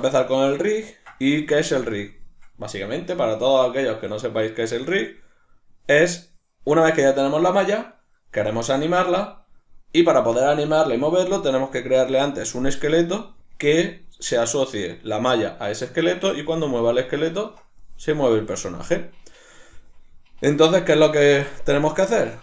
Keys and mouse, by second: 0.0-0.7 shift+middle drag, 21.8 shift+middle click.